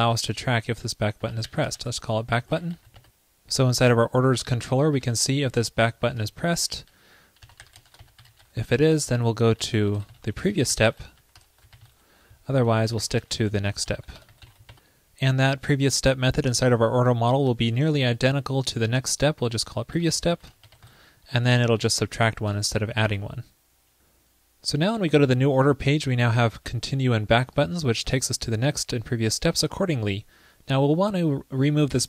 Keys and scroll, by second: 0.0 ctrl+l, 6.5 ctrl+p, 9.1 super+Return, 12.6 super+Return, 13.6 super+Left, 13.9 super+Right, 17.6 super+c, 18.0 super+v, 21.6 super+Right, 21.7 alt+Left, 23.1 super+s.